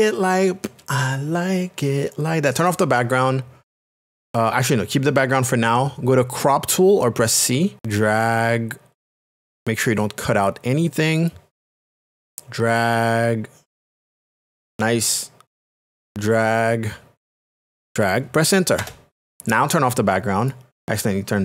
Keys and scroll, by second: 18.8 Return.